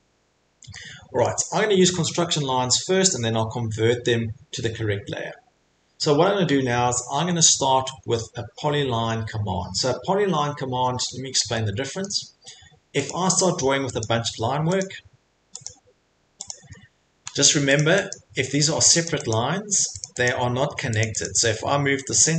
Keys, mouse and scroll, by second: 1.2 middle click, 2.7 scroll, 7.2-7.5 scroll, 8.0 middle click, 8.8 middle click, 10.8-11.3 scroll, 12.0 scroll, 13.0 click, 14.0 click, 14.9 click, 15.6 click, 16.5 click, 17.3 Escape, 17.5 Escape, 17.7 click, 18.1 click, 18.5 Escape, 18.8 Escape, 19.0 click, 19.3 click, 19.8 Escape, 20.0 click, 20.2 click, 20.6 Escape, 21.0 click, 21.2 click, 22.2 click.